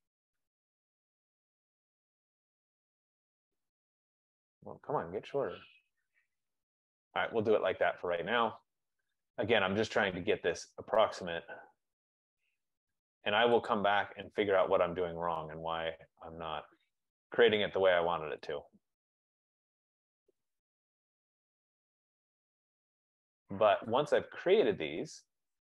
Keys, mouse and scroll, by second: 7.2 click, 8.7 right click, 9.2 right click, 10.5 click, 11.4 click, 13.8 click, 17.0 click, 17.8 right click, 18.6 click, 20.6 click, 24.2 click.